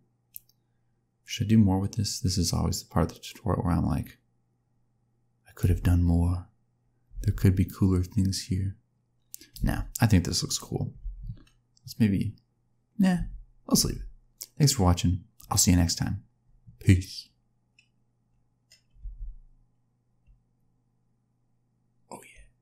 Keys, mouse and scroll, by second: 5.6 space, 7.1 space, 7.6 click, 9.5 space, 10.9 space, 13.7 space, 14.6 click.